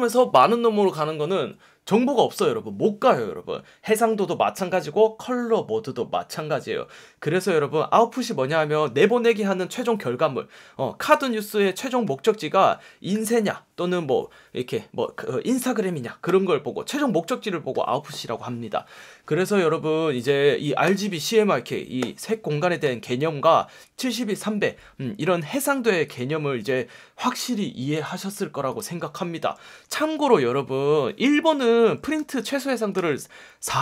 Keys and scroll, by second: 32.1 F1, 32.9 F1.